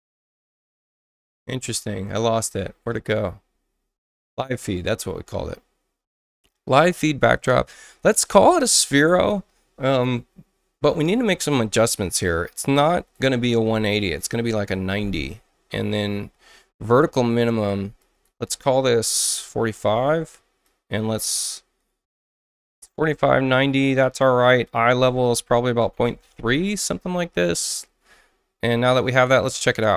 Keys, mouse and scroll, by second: 4.4 click, 4.6 click, 8.3 click, 12.9 click, 14.0-14.9 typing, 18.0 click, 19.1-19.9 typing, 20.6 click, 22.1 click, 24.6 click, 25.5 ., 25.8 3, 26.0 Tab, 27.4 click.